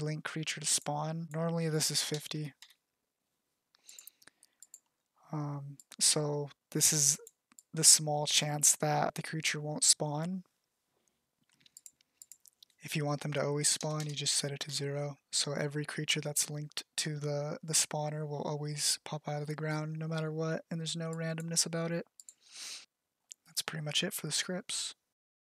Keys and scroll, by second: 1.0 BackSpace, 1.2 5, 1.4 0, 15.0 BackSpace, 15.9 0.